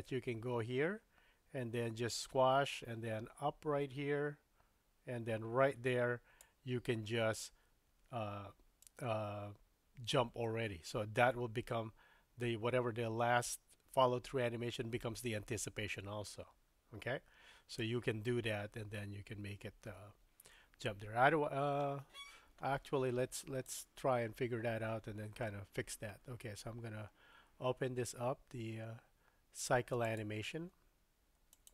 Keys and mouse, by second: 8.8-17.9 drag, 23.8-31.7 drag.